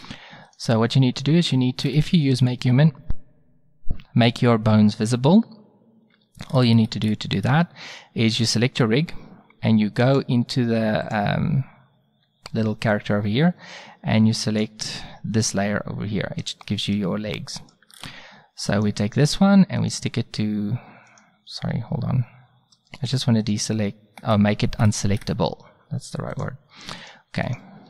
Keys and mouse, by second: 1.8-2.4 middle drag, 5.4-7.8 middle drag, 8.4-9.9 drag, 13.0-14.5 middle drag, 16.7-17.7 middle drag, 17.9-18.7 drag, 26.3 click.